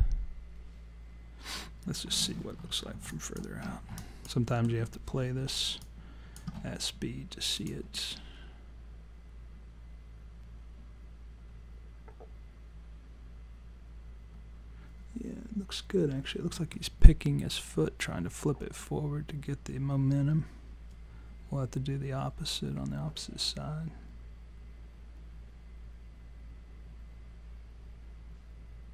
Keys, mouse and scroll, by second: 2.6 scroll up 1, 2.7-3.6 scroll down 3, 3.1 alt+click, 3.7 scroll down 2, 4.0 alt+click, 4.5 alt+middle click, 5.8 alt+click, 7.6 click.